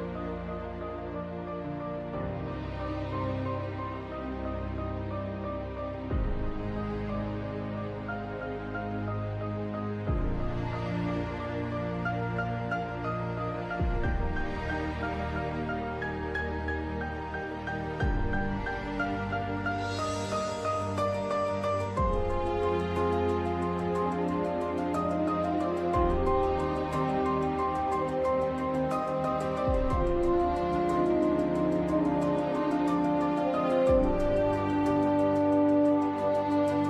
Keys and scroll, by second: 18.8 scroll down 1, 19.6-20.0 scroll down 2, 21.1 scroll down 1, 21.2 scroll up 1, 22.1 scroll down 1, 22.2 scroll up 1.